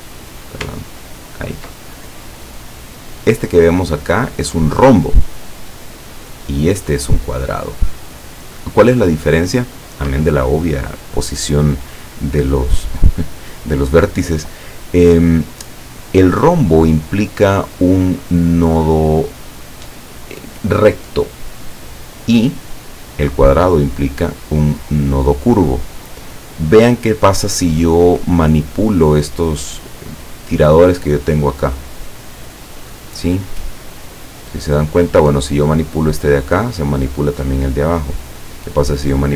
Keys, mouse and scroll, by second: 0.4 click, 1.0-1.4 ctrl+scroll up 2, 2.4 click, 3.0 scroll down 2, 5.9-6.3 scroll down 2, 8.1-8.5 scroll up 2, 8.5 scroll down 2, 8.8-9.1 scroll up 2, 9.3 scroll down 2, 16.5 click, 22.4-22.8 scroll down 2, 31.4-37.1 drag, 37.7-38.5 scroll up 2, 38.6 scroll down 2.